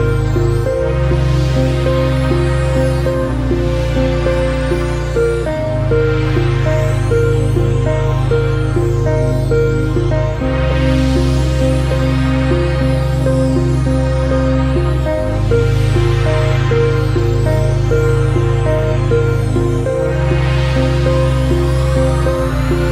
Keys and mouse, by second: 5.7 ctrl+z, 6.4 click, 8.1 click, 9.8 drag.